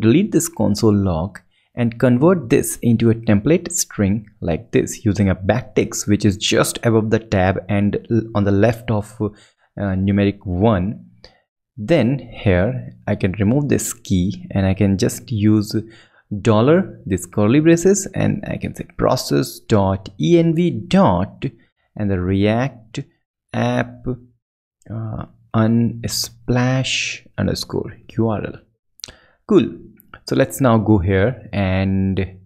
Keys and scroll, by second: 0.1 super+BackSpace, 0.8 super+Down, 1.3 super+Down, 1.4 super+Left, 2.0 BackSpace, 2.6 shift+Down, 2.9 shift+super+Right, 4.3 shift+Left, 11.0 super+Right, 12.0 super+BackSpace, 12.7 alt+shift+Left, 13.4 alt+shift+BackSpace, 14.5 shift+BackSpace, 16.7 shift+Left, 17.7 Left, 28.7 shift+super+Right, 29.5 ctrl+shift+super+Right, 30.5 ctrl+Left.